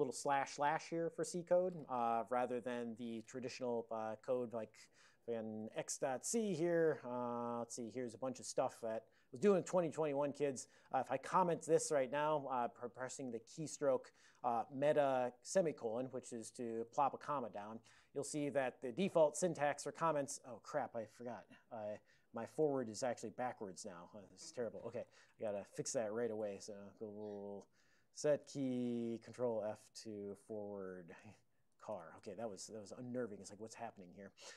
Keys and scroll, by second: 4.0 super+j, 4.7 ctrl+x, 4.9 ctrl+f, 5.4-6.3 typing, 6.3 Return, 9.0 ctrl+x, 9.6 ctrl+g, 9.7 ctrl+g, 16.9 alt+;, 19.0 ctrl+b, 19.3 ctrl+f, 22.7 ctrl+f, 23.0 ctrl+f, 23.2 ctrl+f, 23.8 ctrl+f, 24.0 ctrl+f, 25.1-29.0 typing, 29.5 ctrl+f, 30.1-32.3 typing, 32.9 ctrl+f, 33.1 ctrl+f.